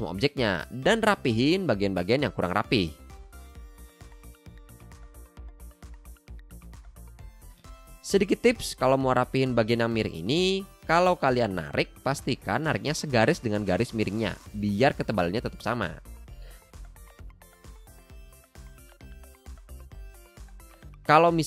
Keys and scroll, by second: 9.5 a, 20.9 v, 21.1 super+x.